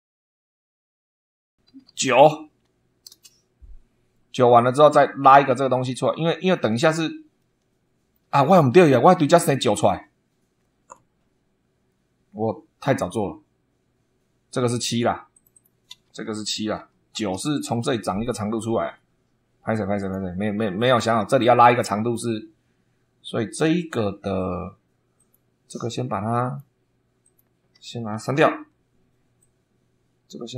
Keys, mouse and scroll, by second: 0.0 super+2, 1.6 shift+h, 2.5 9, 3.0 Return, 6.0 middle click, 6.7 scroll down 2, 7.3 middle click, 15.3 click, 16.7 7, 17.6 Return, 19.9 click, 22.7-23.1 scroll up 1, 25.1 click, 25.8 click, 27.1 click, 28.3 Delete, 29.3-30.5 drag.